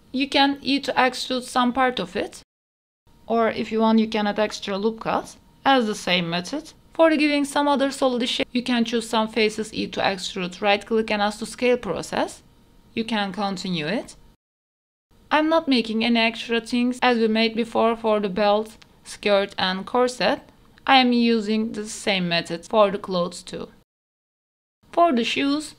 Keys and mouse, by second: 0.0-1.2 typing, 0.2 click, 1.8 Tab, 1.8 middle click, 2.1 middle click, 2.3 middle click, 2.4 Tab, 2.6 middle click, 3.3 ctrl+r, 4.5 3, 5.4 middle click, 5.9 e, 6.5 alt+s, 8.4 middle click, 9.4 ctrl+r, 10.8 ctrl+r, 11.9 Tab, 12.2 middle click, 12.8 middle click, 13.1 Tab, 13.3 shift+middle click, 13.6 ctrl+z, 13.7 middle click, 14.1-16.6 typing, 15.0 shift+middle click, 17.3 middle click, 17.6 middle click, 17.8-19.2 typing, 18.8 middle click, 19.6 middle click, 19.8 middle click, 20.2 middle click, 20.5 middle click, 20.8 middle click, 21.2 middle click, 21.4 middle click, 21.9 middle click, 22.2 KP_3, 22.4 g, 23.1 middle click, 23.6 middle click, 23.9 middle click, 24.0 right click, 24.4 alt+click, 24.9 Tab, 25.6 middle click.